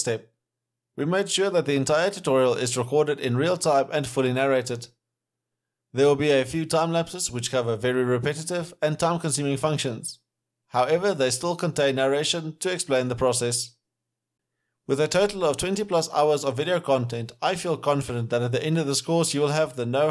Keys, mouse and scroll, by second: 5.9 ], 8.2-8.6 scroll down 1, 9.1 s, 9.1 right click, 9.2 Right, 11.1 s, 11.2-11.7 scroll up 2, 11.6 alt+middle click, 12.8 s.